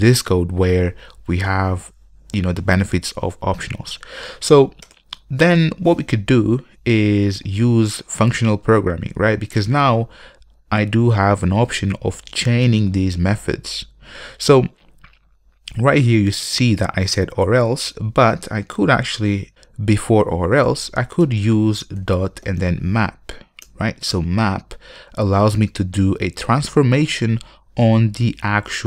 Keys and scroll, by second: 23.8 Return.